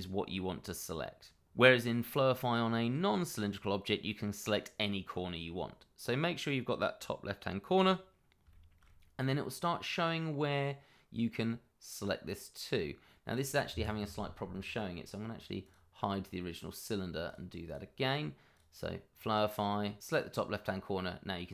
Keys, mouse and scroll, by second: 7.8 click, 8.5 shift+middle click, 8.5 middle click, 8.6 shift+middle click, 13.7 Escape, 15.6 click, 17.7 double click, 18.5 click, 20.0 click.